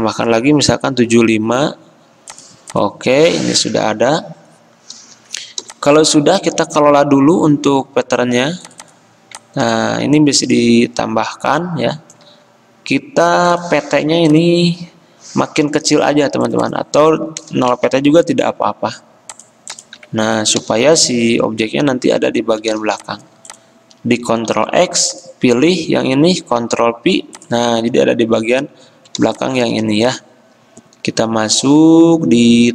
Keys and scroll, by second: 0.8-1.6 typing, 5.8 v, 17.6 0, 17.9 Return, 20.4 Escape, 23.0 ctrl+x, 26.8 ctrl+f.